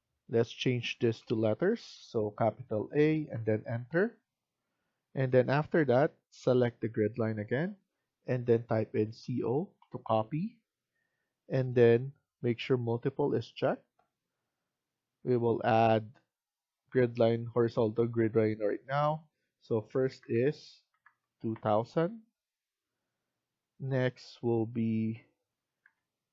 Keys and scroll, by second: 0.9 a, 3.2 Return, 8.9-9.7 typing, 19.6-20.4 typing, 21.3 Return, 25.6-26.3 typing.